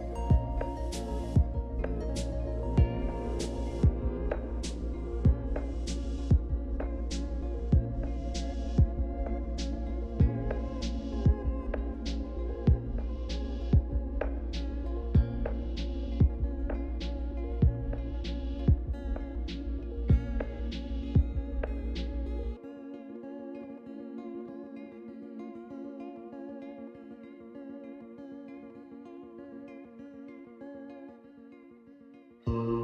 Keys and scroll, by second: 2.7 typing, 4.0-8.1 typing, 9.1-20.9 typing, 20.9 Return, 22.7-27.6 typing.